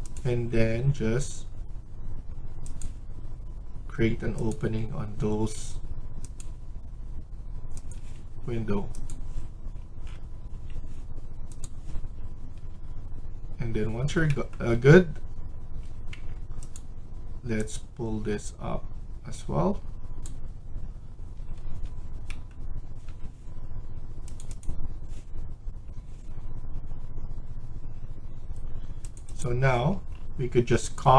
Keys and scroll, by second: 4.4 Escape, 7.8 Escape, 10.4 Escape, 12.4 Escape, 14.7 Escape, 16.1 Tab, 21.2 Escape, 21.6 Escape, 29.8 Escape.